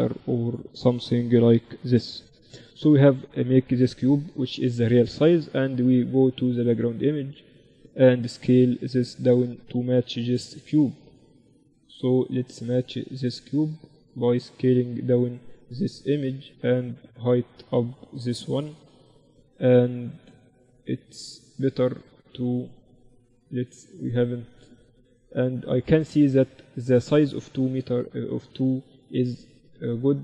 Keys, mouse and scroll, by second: 3.4-6.5 middle drag, 6.5-8.3 drag, 8.7-10.7 drag, 14.8-30.2 drag.